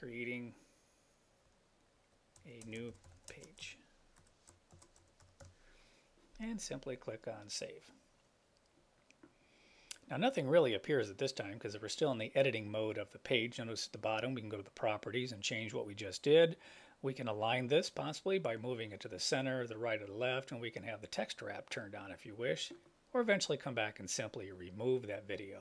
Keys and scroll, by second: 2.7 space, 3.4 space, 4.3 BackSpace.